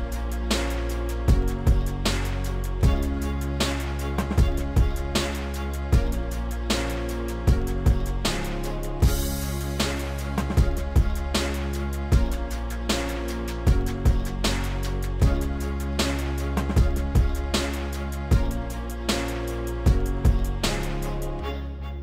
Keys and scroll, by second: 7.9 ctrl+z, 13.0 s, 21.0 3.